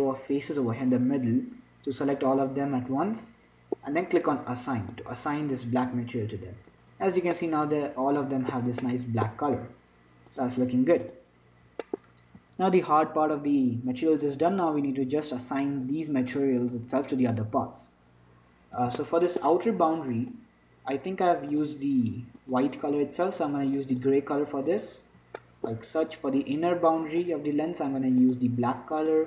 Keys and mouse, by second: 1.3 middle click, 5.2-7.2 drag, 7.2 Tab, 10.4 click, 11.4 click, 12.4 middle click, 14.7-19.1 middle drag, 19.1 z, 20.4-21.9 middle drag, 24.0 click, 25.7 click, 27.3-29.1 right drag, 28.5-29.2 drag.